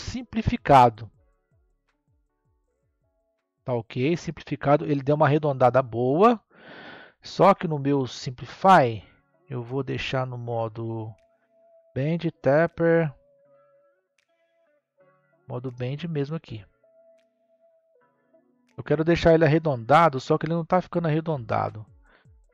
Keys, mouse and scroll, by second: 0.3-3.4 middle drag, 8.2-11.3 drag, 11.5 click, 12.1 click, 12.8 click, 13.2 click, 14.0 click, 14.7-15.2 scroll down 2, 15.2-18.3 middle drag.